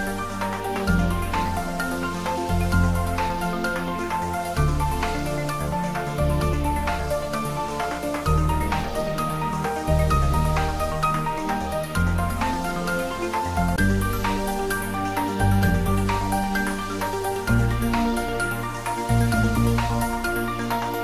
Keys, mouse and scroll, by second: 2.9 click, 3.4-3.7 scroll up 1, 4.5-5.7 typing, 7.4 click, 7.8-8.2 scroll down 1, 8.5 middle click, 9.6 Tab, 10.1 scroll up 1, 11.1-16.4 middle drag.